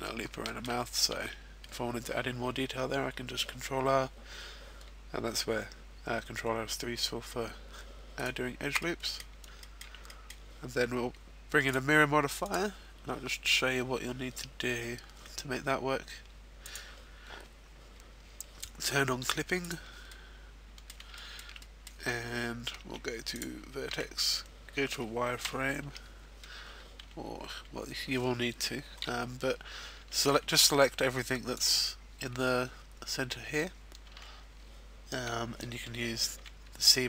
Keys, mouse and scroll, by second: 0.3-0.8 shift+scroll down 1, 0.8 shift+middle click, 1.1 ctrl+r, 8.2 right click, 8.8 middle click, 9.5 shift+middle click, 10.1 middle click, 11.6 click, 12.4 click, 19.5 click, 20.1 middle click, 21.0 shift+middle click, 21.5 middle click, 22.7 ctrl+Tab, 23.8 z, 24.2-24.7 scroll down 2, 25.3 KP_1, 25.8 z, 26.4-26.9 scroll up 2, 26.9 z, 27.4 z, 28.5-29.0 scroll down 1, 29.7 scroll up 1, 30.3 z, 30.3 b, 34.0 z, 36.3 c.